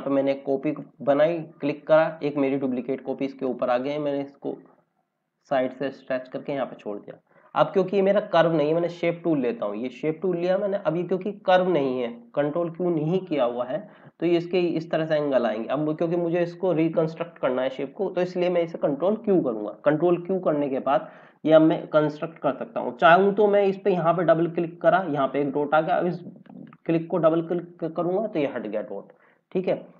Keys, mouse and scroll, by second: 0.7 click, 18.9 ctrl+q, 26.4 click.